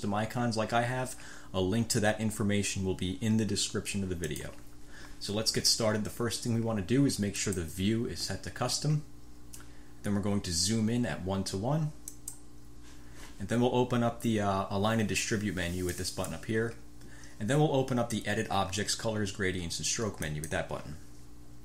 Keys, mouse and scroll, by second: 4.4 click, 7.5 click, 12.2 click, 16.0 click, 20.3 click.